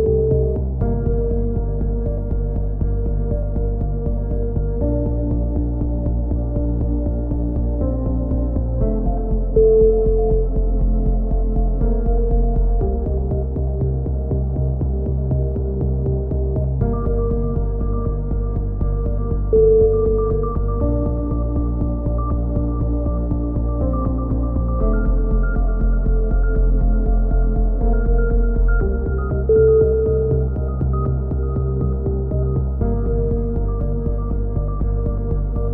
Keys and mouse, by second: 0.3-1.9 right drag, 1.4 click, 1.9 click, 2.9 click, 3.9 click, 4.0 a, 4.4 z, 5.8 click, 6.8-8.3 drag, 8.1 alt+m, 9.1 click, 9.8 right click, 10.2 alt+m, 11.3 middle click, 11.8 right click, 12.4 x, 14.0-15.8 right drag, 15.3 x, 16.2 a, 16.7-17.9 middle drag, 16.7 z, 18.9-20.1 middle drag, 20.3 middle click, 20.7 click, 21.3 middle click, 22.3 click, 22.9 middle click, 23.3 click, 24.4 click, 25.6 a, 25.7-28.3 middle drag, 28.8 ctrl+r, 29.7-30.8 right drag, 31.0 right click, 31.4 click, 32.1-33.4 right drag, 32.7 click, 33.6-34.7 middle drag.